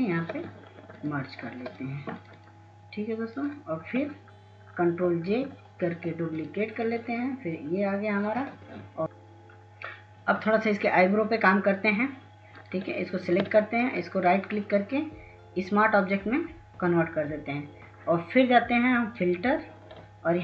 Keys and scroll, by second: 7.0 ctrl+j, 19.1 ctrl+s, 19.3 ctrl+s, 20.3 ctrl+s.